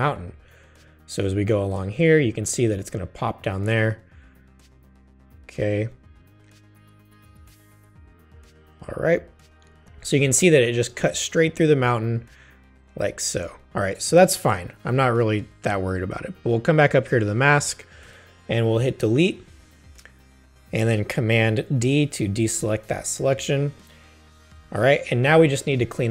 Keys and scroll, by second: 18.0 BackSpace, 22.3 super+d.